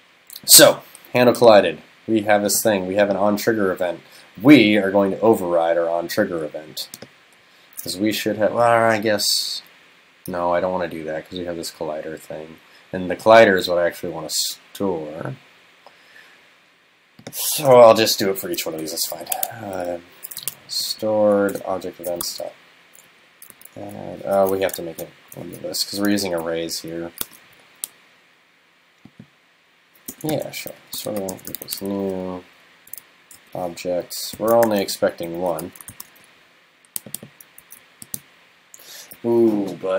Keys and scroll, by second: 24.9 shift+super+Left, 26.0 shift+super+Left, 27.3 super+x, 35.9 shift+super+Left, 37.7 super+c.